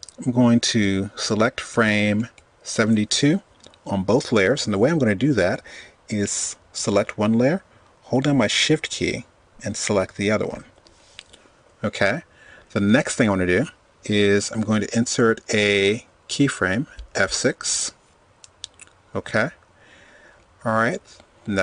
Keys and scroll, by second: 13.1 F6.